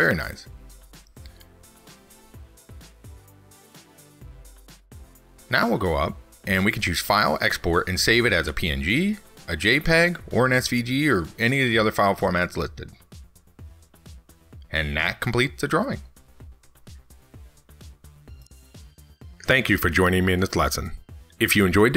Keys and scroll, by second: 4.6 ctrl+s.